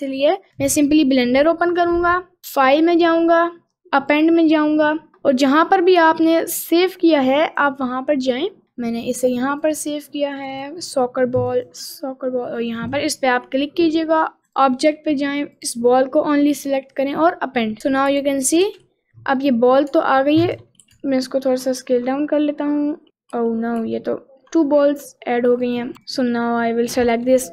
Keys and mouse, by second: 2.6-4.4 drag, 18.2 g, 21.0 s, 22.3 middle click, 23.4 ctrl+z, 23.8 ctrl+z, 24.9 middle click, 25.7 click, 25.9 Delete, 25.9 ctrl+z, 26.2 click, 27.3 Delete.